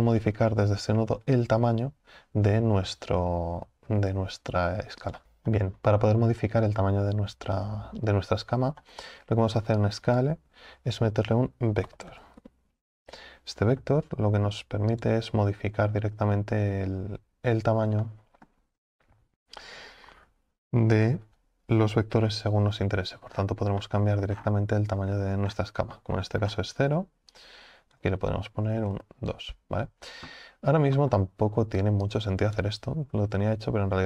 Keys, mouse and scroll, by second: 5.2 click, 18.0-29.0 middle drag, 29.0-34.0 drag.